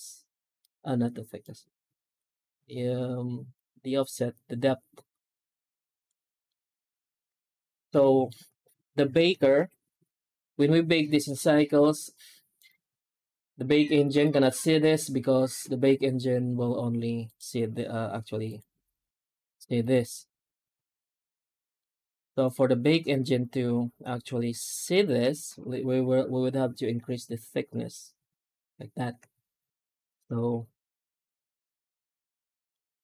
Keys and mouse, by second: 6.4 middle click, 7.9 shift+middle click, 12.4-13.9 drag, 15.4-22.8 drag, 25.1 F9, 29.9-33.0 drag.